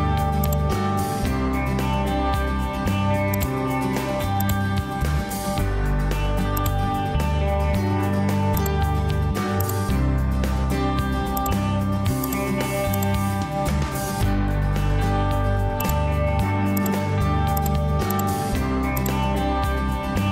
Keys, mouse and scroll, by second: 5.3 Escape.